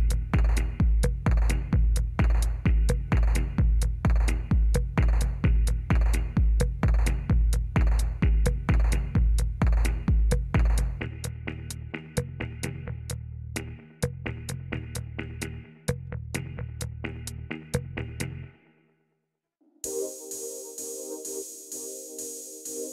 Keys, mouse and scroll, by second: 0.0 Down, 0.3 Down, 0.5 Down, 1.1 Down, 3.7 Down, 4.8 Down, 6.5 Up, 7.1 Down, 7.3 Down, 10.6 Down, 10.9 Down, 11.4 Down, 11.7 Down, 11.9 Down, 12.1 Down, 13.7 Down, 15.2 Down, 15.5 Down, 15.8 Down, 16.0 Down, 16.3 Down, 22.3 Up, 22.7 Up.